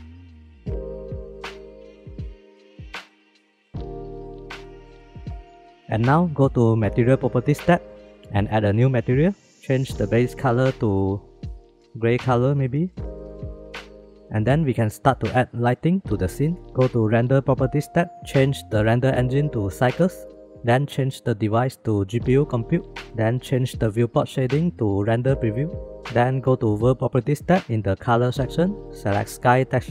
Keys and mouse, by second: 0.2 middle click, 1.7 click, 2.3 s, 4.8 KP_0, 8.0-9.2 drag, 16.6 shift+middle click, 19.5-20.3 drag, 21.7-22.8 drag, 24.8 click, 28.8-29.9 drag.